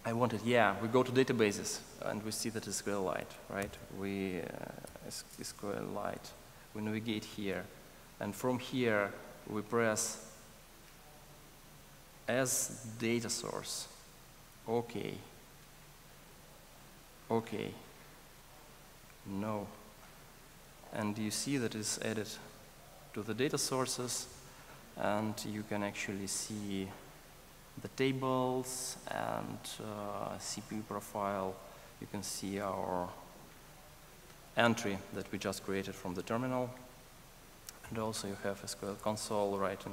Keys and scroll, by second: 3.7 ctrl+shift+super+o, 30.7 super+Down.